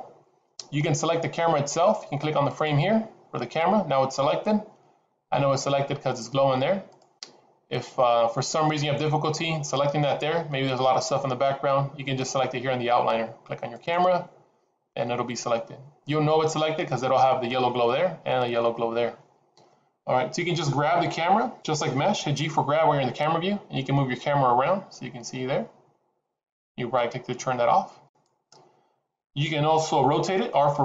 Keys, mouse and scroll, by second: 2.5 click, 7.0 click, 13.7 click, 23.1 g, 30.7 r.